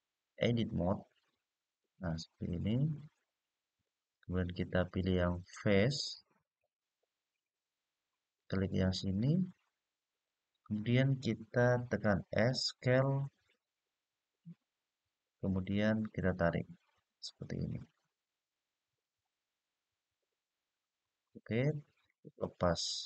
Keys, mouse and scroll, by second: 2.7 middle click, 6.3 click, 8.1 click, 13.0-20.7 s.